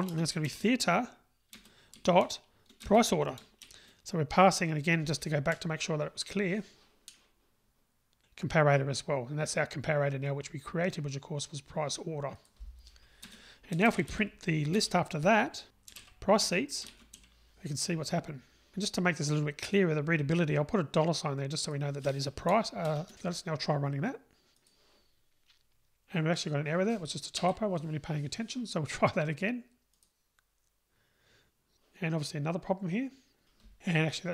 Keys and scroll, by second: 1.5 Return, 6.8 Return, 14.8 Return, 16.9 Return, 24.7 ctrl+r, 27.4 Delete, 30.0 Delete, 30.1 ctrl+r, 33.4 super+z.